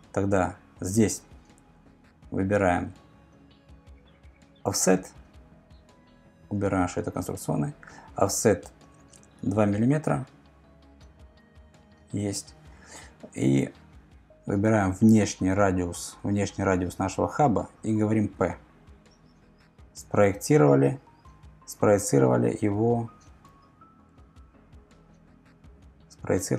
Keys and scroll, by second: 4.7 o, 9.4 2, 11.2 Return, 18.3 p.